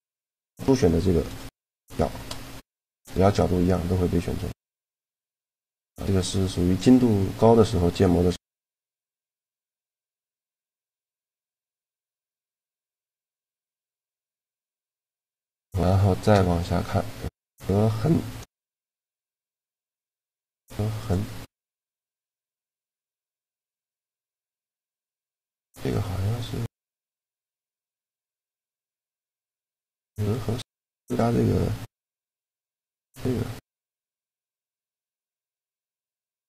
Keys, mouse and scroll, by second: 1.7 shift+g, 5.1-7.1 drag, 7.1-8.6 middle drag, 9.5-11.4 middle drag, 11.4 scroll up 1, 11.5-14.2 middle drag, 14.2 a, 15.5 shift+g, 18.6 shift+g, 19.1-20.8 right drag, 19.5 shift+g, 22.7-24.5 drag, 25.4-27.3 drag, 28.3-30.2 drag, 30.0-31.9 right drag.